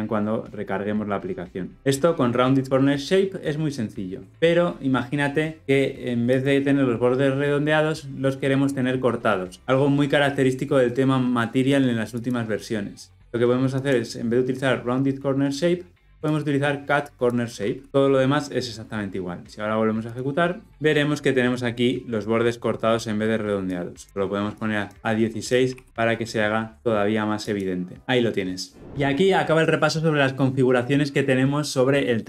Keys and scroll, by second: 17.9 Tab, 20.1 shift+F10, 27.4 shift+F10.